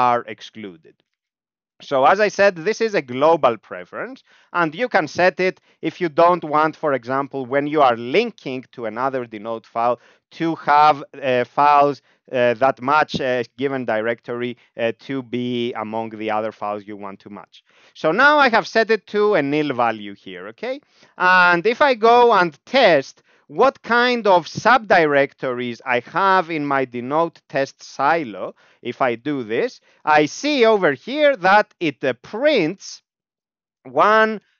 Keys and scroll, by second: 1.1 ctrl+p, 2.1 Down, 2.8 End, 3.9 ctrl+e, 17.6 Down, 17.8 Down, 18.0 Up, 18.2 Up, 19.3 ctrl+j, 20.0 Down, 20.1 Down, 20.3 Down, 20.8 Up, 21.2 End, 22.3 Up, 23.7 Down, 24.0 Left, 24.2 Left, 24.5 Left, 24.7 Left, 24.8 Left, 25.0 Left, 25.3 Right, 25.5 Right, 25.7 Right, 25.8 Right, 26.1 Right, 28.7 ctrl+j, 29.4 Right, 30.0 Up, 30.2 Up, 30.5 Right, 33.1 ctrl+alt+f, 34.4 ..